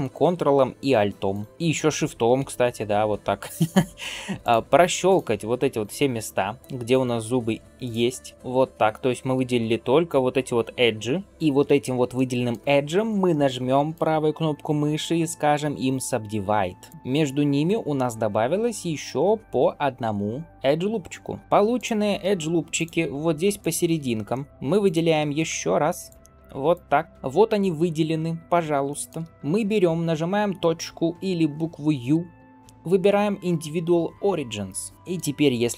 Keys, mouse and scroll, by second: 1.2 ctrl+alt+click, 4.2 ctrl+alt+shift+click, 4.9 ctrl+alt+shift+click, 5.6 ctrl+alt+shift+click, 6.7 ctrl+alt+shift+click, 7.7 ctrl+alt+shift+click, 8.3 middle click, 8.3-9.0 scroll down 1, 9.4-9.8 scroll up 2, 11.1 scroll down 1, 11.2-11.7 shift+middle drag, 11.2 scroll up 1, 12.0-12.4 shift+middle drag, 13.8-16.8 right drag, 21.6 alt+click, 22.6 alt+shift+click, 23.4 alt+shift+click, 24.1 shift+middle click, 24.5 scroll up 1, 24.7 alt+shift+click, 25.6 alt+shift+click, 26.5 alt+shift+click, 27.0 shift+middle click, 27.0 scroll up 1, 28.4 scroll down 1, 28.7 shift+middle click, 29.2 middle click, 34.9 shift+middle click.